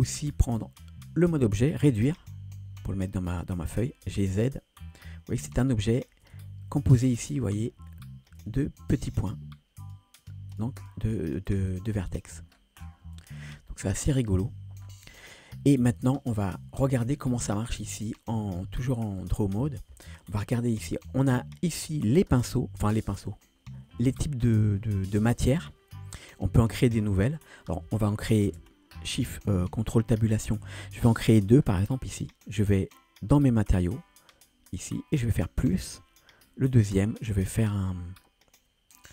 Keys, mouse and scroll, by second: 2.1 s, 3.4 click, 3.9 g, 6.3 Tab, 6.7-7.0 scroll up 2, 7.2 shift+middle drag, 7.7 scroll up 2, 8.0 Tab, 8.4 Tab, 8.8 click, 9.8 click, 10.2 click, 10.5 click, 11.0 click, 11.3 click, 11.5 click, 11.7 click, 11.9 click, 12.1 click, 12.5 scroll down 1, 13.2 Tab, 13.2 scroll down 2, 13.7-14.2 shift+middle drag, 14.8 scroll down 2, 15.3 shift+middle drag, 18.1-19.6 drag, 21.2-25.9 drag, 28.5 ctrl+space, 31.3-31.7 scroll down 3, 33.7 click, 33.7 scroll down 1, 35.6 click, 36.7 click, 37.6 scroll down 2.